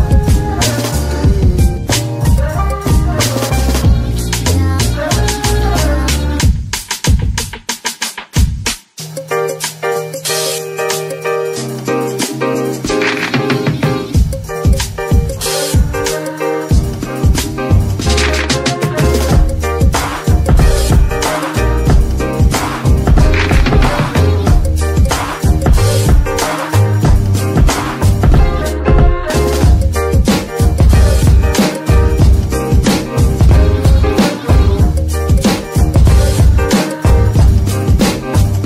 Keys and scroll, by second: 2.4 Tab, 7.5 g, 14.6 Tab, 20.1 g.